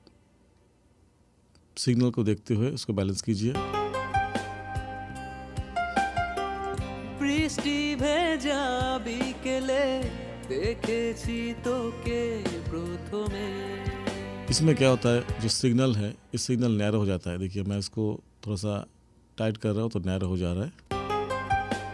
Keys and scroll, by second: 3.5 space, 15.5 space, 20.8 space.